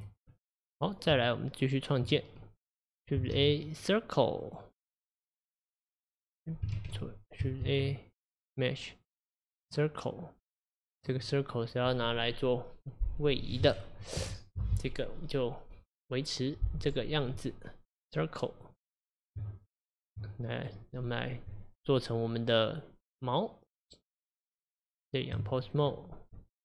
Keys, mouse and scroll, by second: 0.0 Tab, 0.4-1.1 middle drag, 1.1 Tab, 2.7 click, 3.4 shift+a, 6.8 ctrl+z, 7.7 shift+a, 11.2-14.2 drag, 19.4 Tab, 20.6 click, 21.5 Tab.